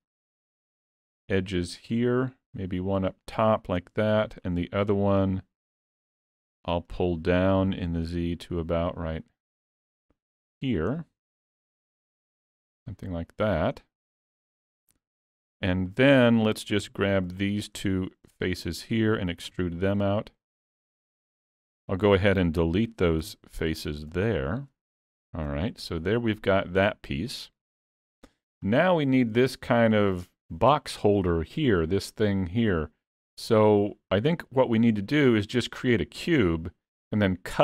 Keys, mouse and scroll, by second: 4.4 alt+click, 7.0 click, 10.9 scroll down 2, 11.5 shift+middle click, 12.8 click, 16.9 3, 17.4 click, 18.0 shift+click, 18.6 middle click, 19.5 e, 25.1 Tab, 25.6 scroll down 1, 26.1 middle click, 28.7 scroll down 2, 29.0 shift+middle click.